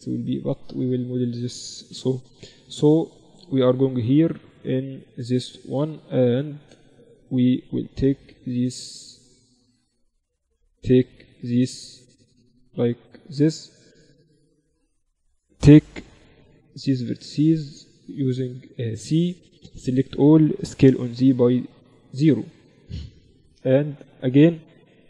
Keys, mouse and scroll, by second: 1.2 KP_1, 1.9 z, 2.6-4.1 middle drag, 4.1-5.5 right drag, 4.3 z, 5.0 Tab, 5.6 z, 6.3-7.6 drag, 6.7 a, 7.6 a, 8.0 a, 10.4 ctrl+r, 14.5 a, 15.5 c, 20.1 s, 24.3 a.